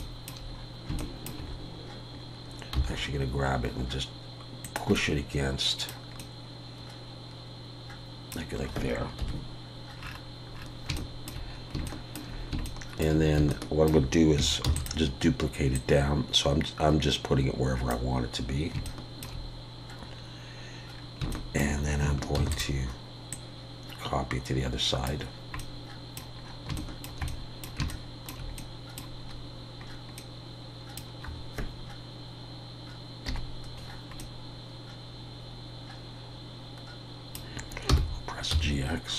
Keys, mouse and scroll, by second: 0.0 shift+middle click, 0.3 shift+scroll down 1, 0.5-1.2 scroll up 2, 1.0 shift+middle click, 1.5 scroll up 2, 2.7 g, 4.9 middle click, 9.2 KP_1, 10.0-10.6 scroll down 10, 11.0 shift+middle click, 11.5 scroll down 1, 11.9 shift+middle click, 12.1 shift+scroll up 1, 12.6 shift+middle click, 14.7 shift+d, 15.7 click, 18.9 shift+middle click, 20.1-20.4 scroll up 3, 20.9-21.5 scroll down 3, 21.3 shift+middle click, 21.6 shift+scroll up 1, 22.4 shift+d, 23.3 click, 25.6 middle click, 26.4-26.9 scroll up 4, 26.8 shift+middle click, 27.3 middle click, 27.9 shift+middle click, 28.6 scroll up 1, 29.3 scroll down 1, 29.8-30.3 scroll up 2, 30.2 middle click, 33.3 KP_Decimal, 34.2 middle click.